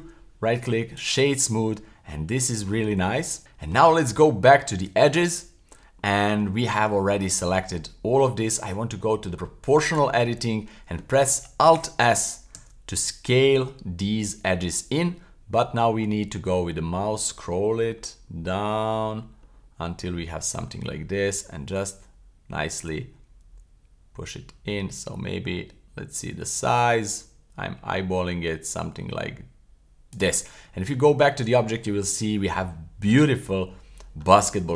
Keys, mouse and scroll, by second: 0.0 w, 1.6-3.8 middle drag, 3.4 w, 3.9 Tab, 6.0 middle click, 6.6 middle click, 7.0-7.7 scroll up 1, 7.7 middle click, 9.3 click, 9.8 click, 12.6 alt+s, 15.5-15.9 scroll down 2, 15.9-19.6 scroll up 26, 21.4-22.4 scroll down 1, 24.9-25.7 scroll down 2, 25.7-26.0 scroll up 1, 26.2-28.5 scroll down 1, 30.1 click, 30.6 Tab, 31.8 middle click, 32.2 scroll down 2, 32.6-33.1 middle drag, 33.3-34.2 middle drag, 34.4-34.7 middle drag.